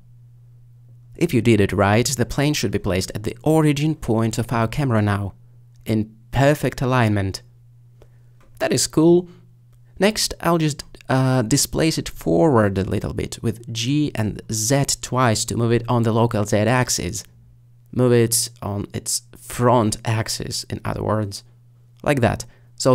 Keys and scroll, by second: 12.8 g, 13.6 z, 14.4 z, 22.0 alt+g, 22.4 z, 22.8 z.